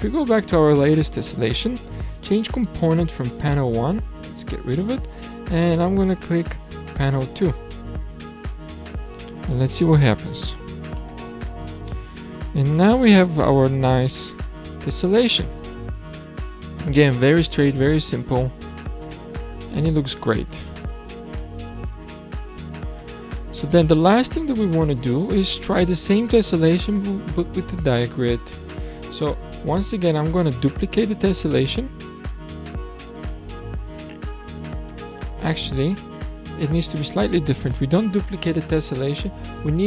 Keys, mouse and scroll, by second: 0.5 click, 3.8 click, 5.0 click, 9.0-10.4 scroll down 19, 10.4-11.5 shift+middle drag, 11.5-13.1 scroll down 30, 13.1-16.0 middle drag, 19.8-20.4 scroll up 7, 20.6 scroll down 1, 20.7-23.3 middle drag, 23.3-23.9 scroll down 4, 23.9-24.5 scroll up 4, 24.5-25.8 shift+middle drag, 25.8-28.4 scroll up 4, 28.4 click, 30.0 drag, 31.3 shift+d, 34.0 Escape, 34.8-35.4 scroll down 4, 37.1-37.8 scroll down 4, 37.8-39.5 middle drag, 39.5 click.